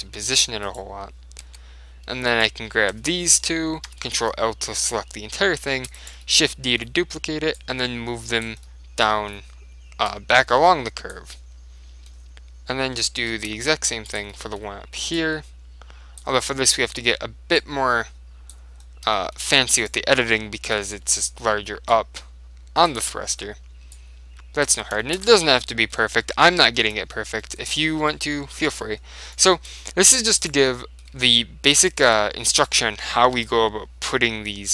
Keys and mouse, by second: 0.8-4.2 right drag, 1.5 Tab, 4.0 ctrl+l, 4.8-7.7 middle drag, 5.9 shift+d, 7.7 click, 8.7 middle click, 9.3 middle click, 10.2 click, 11.5 right click, 11.9-13.2 middle drag, 13.5 shift+d, 14.3-16.7 drag, 14.4-16.1 middle drag, 16.5 middle click, 17.0 middle click, 18.2 click, 19.3-21.0 middle drag, 19.9-21.6 right drag, 20.8 ctrl+l, 22.0 click, 23.2-24.8 middle drag, 24.1 click, 25.1-27.4 middle drag, 25.4 Tab, 30.5-34.4 right drag, 31.3 Tab, 31.9 Tab, 32.0 middle click, 32.2 Tab, 33.5 ctrl+l.